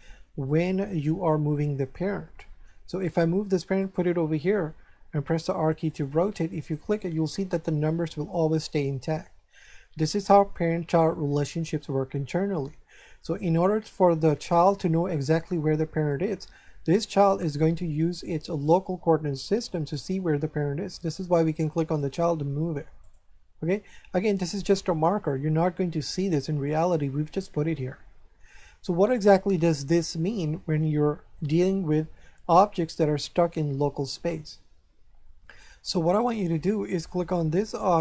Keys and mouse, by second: 0.5 right click, 1.3 g, 3.8 click, 5.3 r, 5.9 click, 6.6 right click, 14.5 right click, 15.9 right click, 17.0 right click, 21.5 right click, 23.0 click, 24.5 right click, 29.6 shift+middle click, 32.5 right click, 36.9 right click.